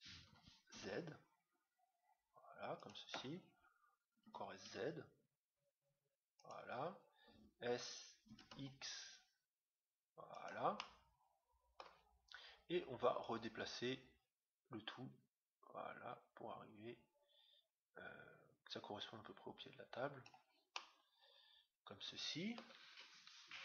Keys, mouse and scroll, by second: 4.2 s, 8.2 s, 10.7-12.7 middle drag, 13.2-14.8 drag, 20.7-22.4 middle drag.